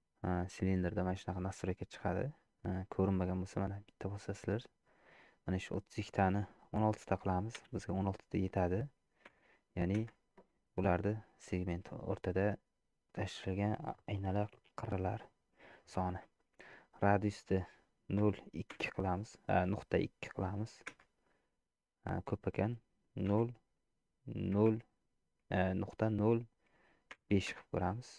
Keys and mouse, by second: 3.7 click, 5.5-10.6 drag, 17.0-28.1 drag.